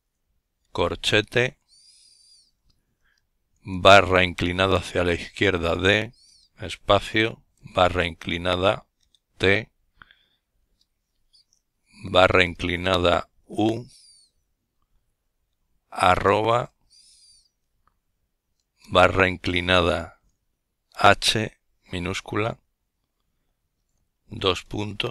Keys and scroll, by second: 1.1-2.1 typing, 3.6 typing, 5.5 typing, 6.9 typing, 10.1 typing, 11.3 typing, 14.0 typing, 16.8 typing, 18.8 typing, 22.0-22.7 typing.